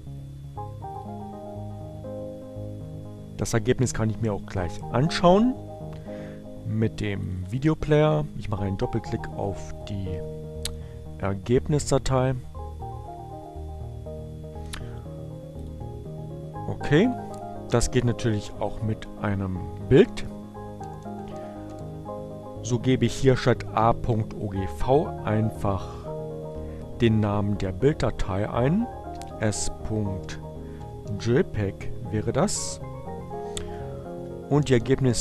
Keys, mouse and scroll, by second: 1.9 click, 9.9 click, 13.2-15.9 drag, 17.9-19.3 drag, 20.2 click, 21.4 Up, 22.1 Left, 23.5 BackSpace, 30.7 s, 31.8-33.6 typing.